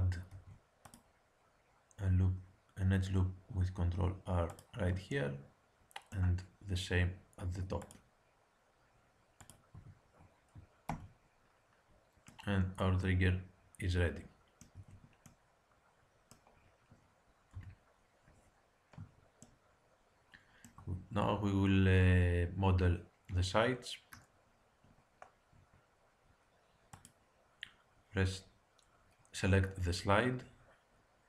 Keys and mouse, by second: 0.2 ctrl+r, 7.4 ctrl+r, 9.7 Tab, 10.9 z, 14.7 a, 15.2-17.5 middle drag, 17.5 KP_1, 24.8-26.9 middle drag, 26.9-28.9 drag.